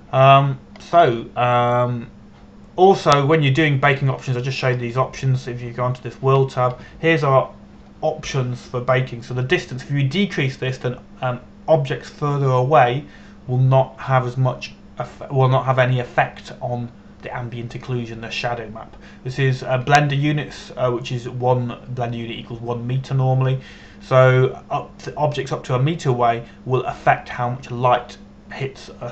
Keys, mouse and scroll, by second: 2.6-3.3 scroll up 1, 5.5 click, 6.2-8.4 scroll down 1.